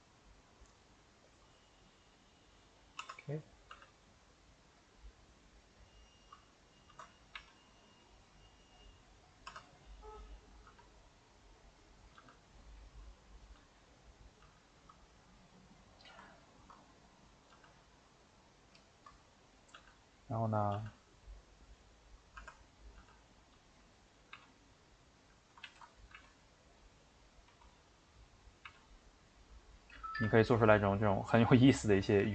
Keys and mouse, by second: 1.3 click, 3.1 Tab, 3.4 click, 3.7 g, 7.3 e, 9.6 Tab, 9.7 middle click, 10.3 click, 10.7 g, 12.0 click, 12.2 g, 13.3 click, 13.5 g, 14.2 click, 14.4 g, 16.3-17.3 ctrl+middle drag, 17.3 click, 17.5 g, 18.8 shift+middle click, 19.5 click, 19.8 g, 20.6 click, 20.7 g, 22.5 Tab, 22.8 click, 23.0 g, 24.2 click, 24.4 e, 25.7 ctrl+z, 26.0 click, 26.1 e, 30.3-32.2 ctrl+middle drag, 32.2 ctrl+z.